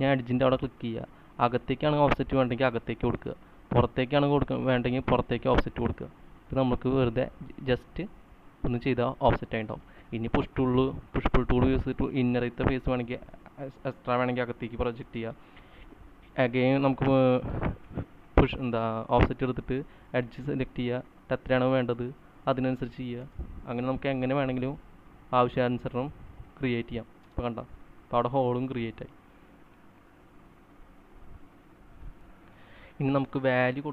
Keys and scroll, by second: 10.2 space, 11.7 p, 15.5 space, 18.2 f, 23.7 space, 24.0 p, 27.7-29.3 typing, 32.6 c, 32.7 c.